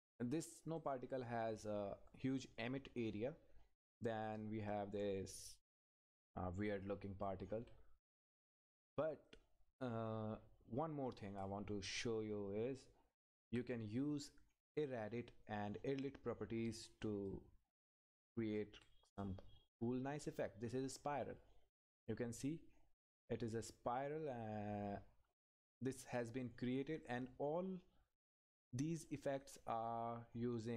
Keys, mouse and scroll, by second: 3.5 Up, 5.2-5.6 scroll up 1, 5.6 Up, 5.7-6.4 scroll up 1, 6.4 Up, 7.6 scroll up 1, 9.3 click, 10.3 scroll up 1, 11.4 click, 12.0 Up, 14.8 Right, 16.3-16.7 scroll up 1, 16.8 Right, 17.6 Right, 18.1-18.6 scroll up 1, 18.6 click, 18.6 Right, 20.1 scroll up 1, 21.3 Left, 24.2 scroll down 1, 27.1-30.7 drag.